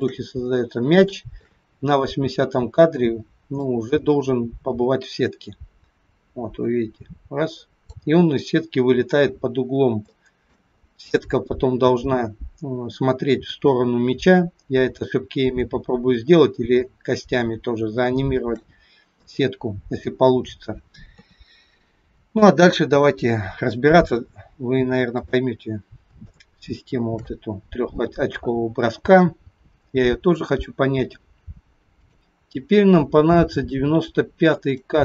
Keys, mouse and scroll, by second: 0.4 scroll down 1, 1.2 shift+middle click, 3.7 click, 10.2 shift+middle click, 10.8-12.5 scroll up 3, 16.3-17.5 scroll down 1, 17.9 scroll down 4, 18.0 shift+middle click, 19.5-20.5 scroll down 2, 20.5-21.2 scroll up 1, 21.2 KP_3, 22.4 shift+middle click, 23.8-24.2 scroll up 1, 25.3 click, 26.4 shift+middle click, 26.4-27.3 shift+scroll up 1, 27.5-28.3 scroll up 1, 33.0-34.6 scroll up 2, 34.6 click.